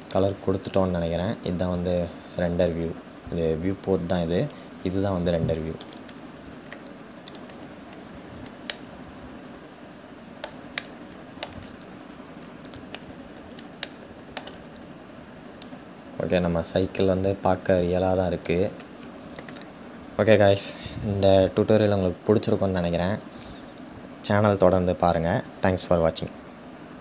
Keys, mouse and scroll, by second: 7.0-7.7 scroll down 1, 7.7-8.4 scroll down 2, 8.4-11.5 middle drag, 11.5-12.6 scroll up 2, 12.6 scroll up 1, 12.6-15.3 shift+middle drag, 15.3 click.